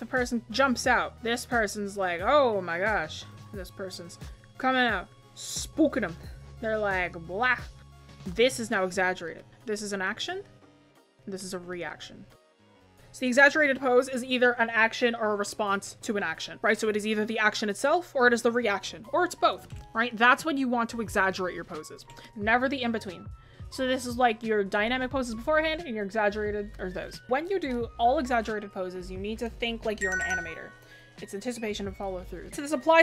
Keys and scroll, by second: 0.7 ctrl+z, 1.6 ctrl+z, 3.6 ctrl+z, 8.4 space.